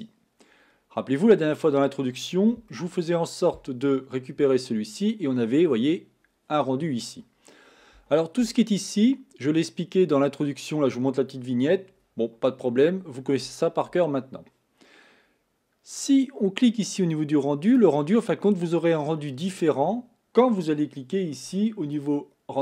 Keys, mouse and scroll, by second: 0.7-2.6 scroll up 8, 2.6 scroll up 1, 2.8-5.7 shift+middle drag, 17.8 click, 19.4-20.6 drag, 22.0-22.6 drag.